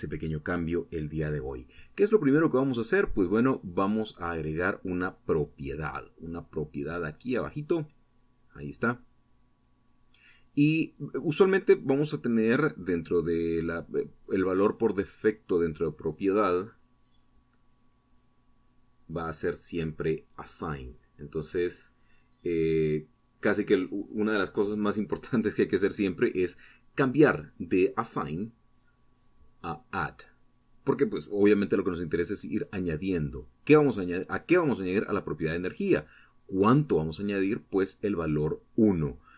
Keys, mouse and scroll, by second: 1.6 click, 4.5 click, 7.0-11.2 drag, 13.5-15.2 drag, 17.7 click, 18.7 click, 21.0-23.2 drag, 24.9 click, 29.2 click, 30.1 click, 31.1 click, 32.6 click, 34.2 click, 35.0 1, 37.2 click.